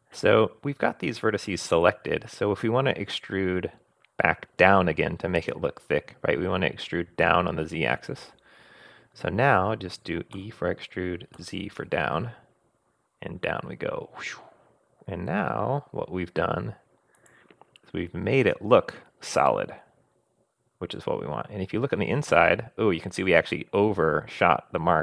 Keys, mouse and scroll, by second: 10.4 e, 19.3 scroll down 1, 19.5-25.0 middle drag, 20.1 click, 20.2-20.8 scroll up 1, 21.1 click.